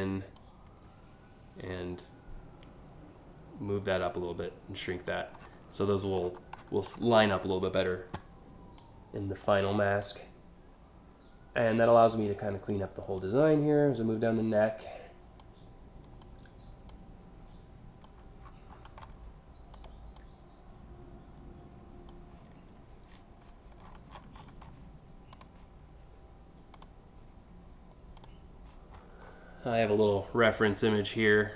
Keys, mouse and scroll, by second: 0.0-4.7 drag, 5.0 scroll down 2, 5.9-6.7 ctrl+scroll down 2, 7.0 ctrl+scroll down 1, 8.4-9.0 drag, 9.6-11.5 drag, 11.9 click, 12.8-14.4 drag, 15.0 click, 16.5-17.7 drag, 18.1 scroll down 2, 18.3 scroll up 3, 18.6 scroll down 1, 19.4 click, 19.8-21.7 drag, 23.4-23.9 scroll up 2, 24.0 scroll down 1, 24.3 scroll up 1, 25.0 click, 26.3 click, 27.8 click, 28.6-29.0 scroll up 3.